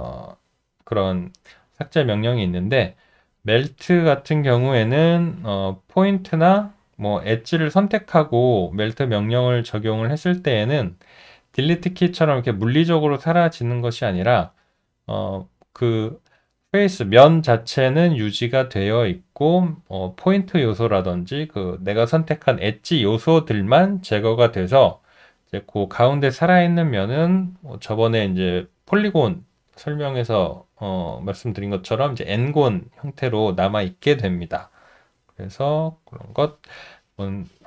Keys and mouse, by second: 2.0 alt+middle click, 2.9 alt+right click, 3.4 alt+middle click, 3.9 alt+right click, 10.1 alt+middle click, 13.8 alt+right click, 14.8 alt+middle click, 35.5 alt+middle click.